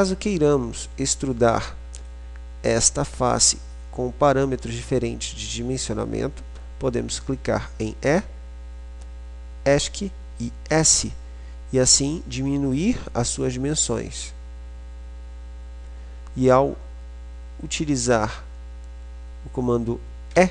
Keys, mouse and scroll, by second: 2.9-4.1 middle drag, 8.1 e, 10.9 s.